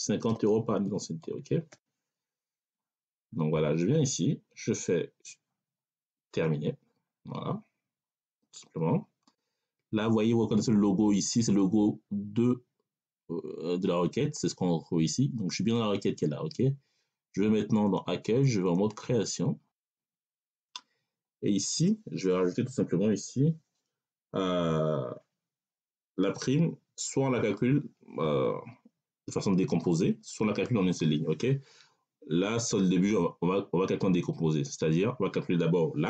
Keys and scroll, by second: 0.0-1.6 typing.